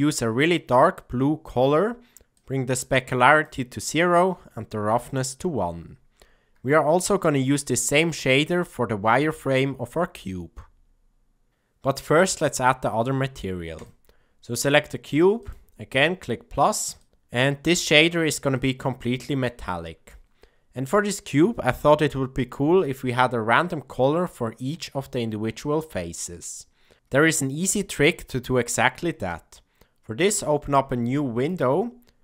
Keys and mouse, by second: 2.3-3.4 drag, 4.1 click, 13.7 click, 16.9 click, 18.4-20.0 drag, 30.3-31.4 drag.